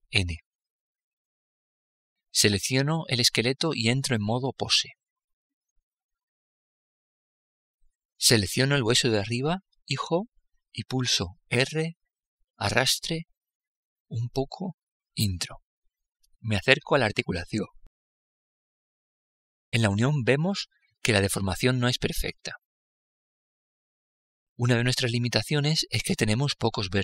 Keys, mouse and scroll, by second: 0.0 n, 2.6-4.3 right drag, 3.6-5.3 drag, 8.3-10.1 right drag, 10.9 r, 15.7-18.3 middle drag, 25.3-27.0 middle drag.